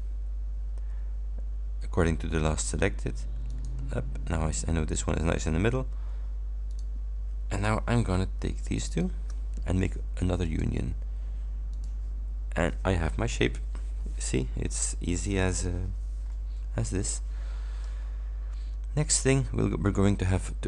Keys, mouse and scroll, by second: 3.5 click, 6.8 click, 7.7 click, 8.9 shift+click, 10.5 click, 11.8 click, 16.3-17.0 scroll up 4, 18.1-18.6 ctrl+scroll down 2, 19.3 ctrl+scroll up 2.